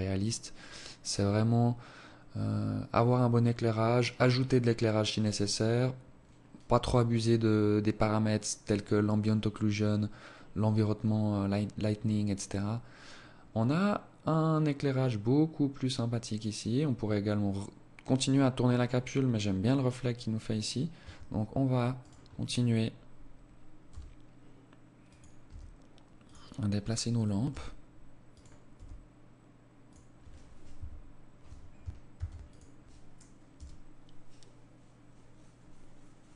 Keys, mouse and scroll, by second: 19.8 Escape, 20.8 right click, 22.6 g, 24.3 r, 25.6 right click, 26.3 g, 27.6 r, 29.6 KP_1, 30.9 ctrl+s.